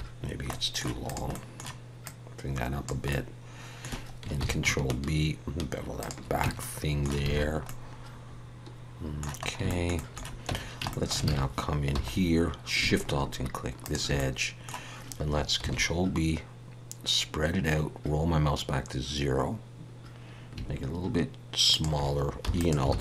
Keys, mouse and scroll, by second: 0.5 middle click, 1.0 click, 1.3 middle click, 2.0 click, 3.1 middle click, 4.6 ctrl+b, 6.4 Tab, 6.6 middle click, 7.3 alt+a, 7.4-7.8 scroll down 3, 7.7 middle click, 9.4 scroll up 2, 9.7 shift+middle click, 10.5 Tab, 10.9 shift+middle click, 11.3 alt+a, 11.9 2, 12.1-12.7 scroll up 2, 13.8 alt+shift+click, 14.2 middle click, 15.6 ctrl+b, 22.9 alt+s.